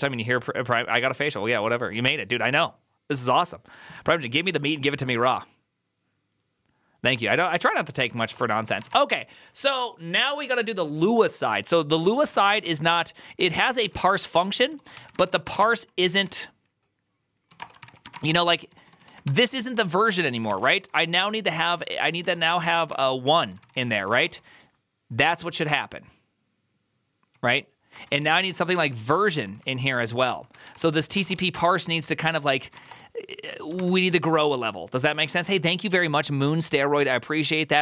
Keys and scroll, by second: 7.8-8.7 typing, 11.9-24.7 typing, 17.4 Return, 17.7 ctrl+c, 17.8 ctrl+c, 28.1-32.7 typing, 32.5 ctrl+c.